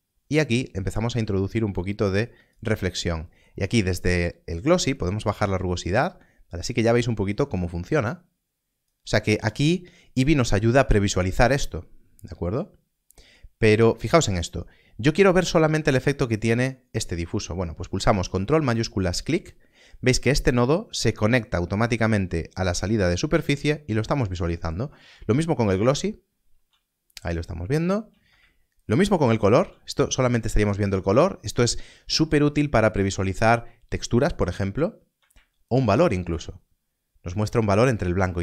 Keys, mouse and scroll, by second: 4.9 click, 13.4 scroll down 1, 15.2 click, 19.0 ctrl+shift+click, 25.6 ctrl+shift+click, 28.8 ctrl+shift+click, 35.6 ctrl+shift+click.